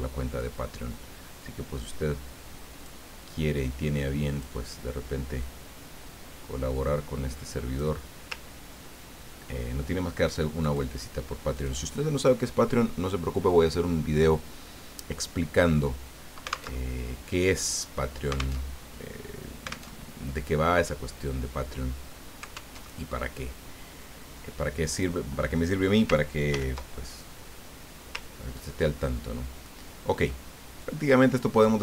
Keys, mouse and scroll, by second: 0.4-3.0 drag, 3.5-4.7 drag, 5.4-8.1 drag, 8.5 ctrl+scroll down 2, 9.0 ctrl+scroll down 2, 10.6 click, 11.5 click, 16.7 alt+Tab, 18.6 alt+Tab, 20.0 alt+Tab, 22.8 alt+Tab, 24.2-25.2 drag, 26.5 ctrl+g, 28.2-28.7 ctrl+scroll down 2, 28.9-30.0 ctrl+middle drag, 30.8-31.8 drag.